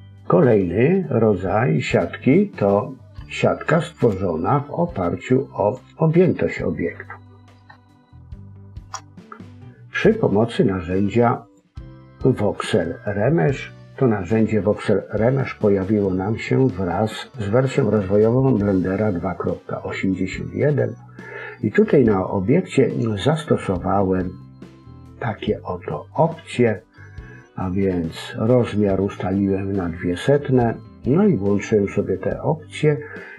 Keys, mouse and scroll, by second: 3.9 click, 5.6 click, 7.7 shift+middle click, 9.1-10.7 scroll up 2, 11.4 click, 21.6 click.